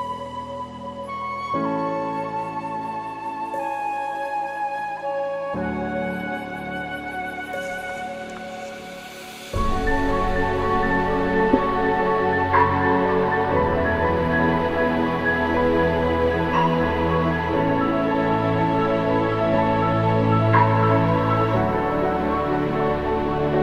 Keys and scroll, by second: 2.7 ctrl+j, 21.3 ctrl+t.